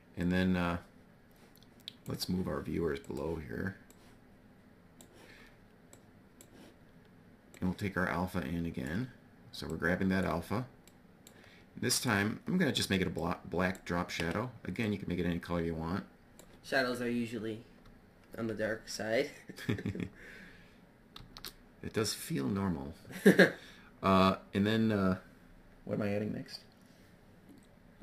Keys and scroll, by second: 20.7 shift+a.